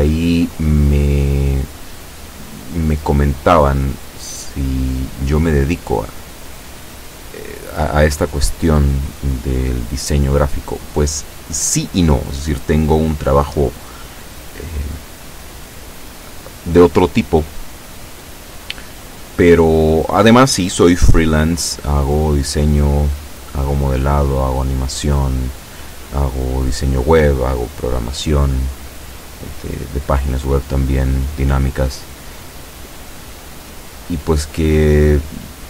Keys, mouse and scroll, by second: 1.5 b, 2.2-4.5 drag, 8.8 e, 15.1-16.4 drag, 21.3 a, 22.1 b, 23.2-24.7 drag, 25.8-31.1 drag, 33.1-35.6 drag.